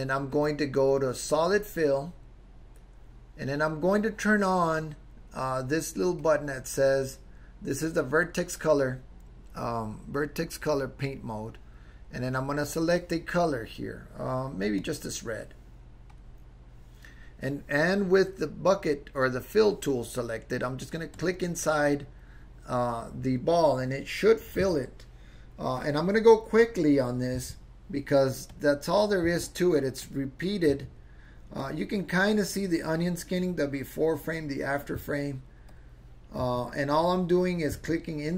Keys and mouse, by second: 0.5-4.3 drag, 6.3 click, 12.2 click, 21.1 click, 27.5 Right, 28.5 click, 29.4 Right, 30.0 click, 30.8 Right, 31.6 click, 35.0 Right, 35.7 click, 36.6 Right, 37.0 click, 37.8 Right.